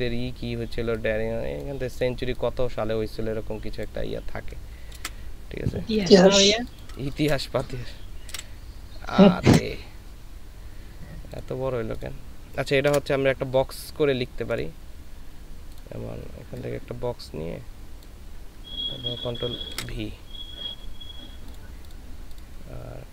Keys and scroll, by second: 5.0 ctrl+c, 6.6 ctrl+space, 7.5 ctrl+space, 8.3 ctrl+v, 9.5 ctrl+z, 12.9 Return, 19.7 ctrl+v.